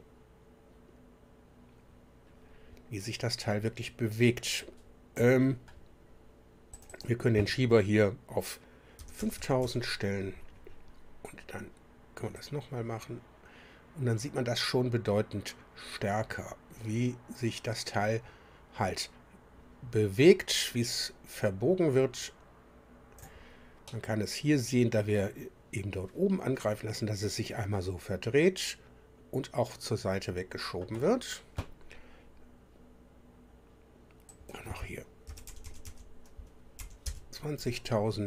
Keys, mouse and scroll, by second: 6.7 click, 9.0 KP_5, 9.2 KP_0, 9.3 KP_0, 9.6 KP_0, 12.4-23.4 drag, 23.8-31.0 drag, 34.3 click, 35.2-36.8 typing, 37.0 KP_Enter.